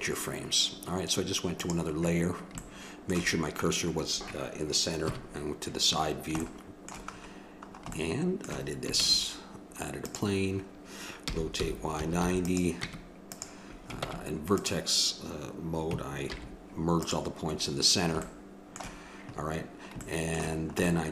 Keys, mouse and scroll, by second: 1.6-3.9 drag, 3.9-5.0 middle drag, 5.0 KP_3, 9.0 shift+a, 11.2 r, 12.7 Tab, 14.0 ctrl+Tab, 16.3 alt+m, 17.4 middle click, 20.1 middle click.